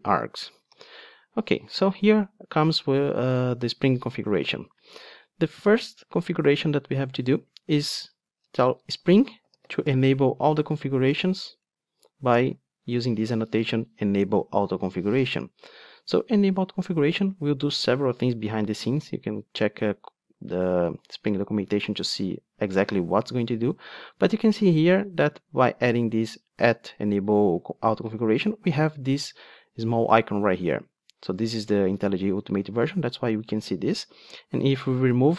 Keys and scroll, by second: 0.7 alt+super+l, 12.4 Return, 35.1 super+x.